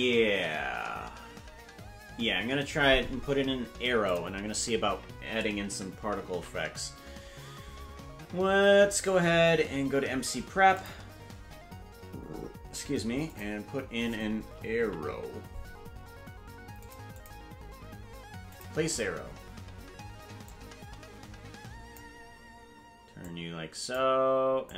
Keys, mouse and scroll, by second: 4.0 click, 6.2 shift+a, 10.7 click, 13.2-16.8 drag, 17.2 click, 18.5 click, 20.4-22.2 drag, 23.2 click, 24.6-24.7 drag.